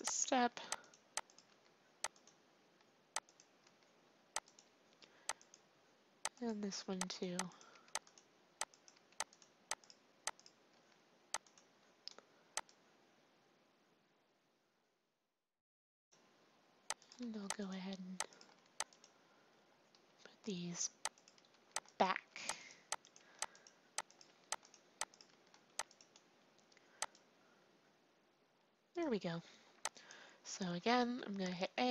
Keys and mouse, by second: 0.3 r, 1.5 r, 3.6 r, 6.7 r, 7.7 r, 8.9 r, 10.7 r, 12.6-14.5 drag, 17.0-28.7 drag, 17.2 r, 18.5 r, 21.5 r, 22.3 r, 23.1 r, 24.2 r, 25.2 r, 30.7 a, 31.0 a.